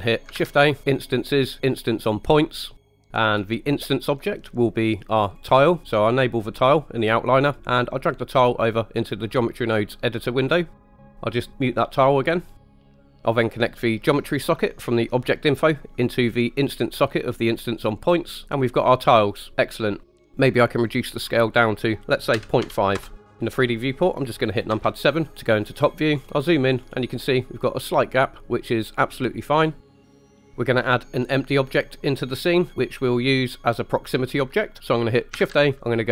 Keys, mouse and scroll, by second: 0.3 shift+a, 2.9 click, 3.0 middle click, 5.3 click, 7.6-10.5 drag, 12.9 click, 14.1-17.2 drag, 20.8-23.0 drag, 24.7 KP_7, 26.1-27.2 scroll up 6, 29.8 scroll down 2, 29.8-30.5 scroll down 5, 30.0 middle drag, 35.4 shift+a.